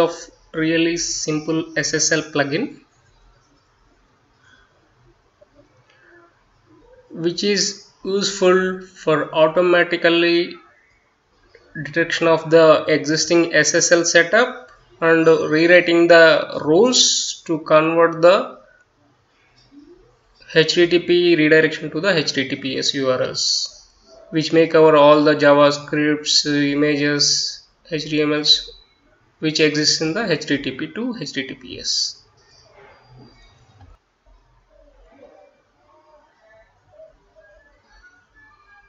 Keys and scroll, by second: 0.0-5.6 typing, 7.0-15.6 typing, 15.7 Return, 20.2-38.8 typing.